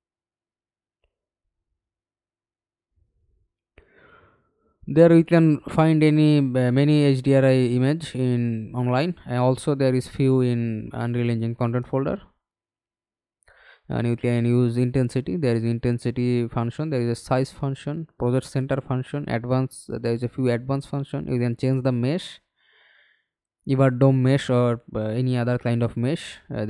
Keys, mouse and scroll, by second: 12.6-13.7 scroll down 2, 20.4 double click.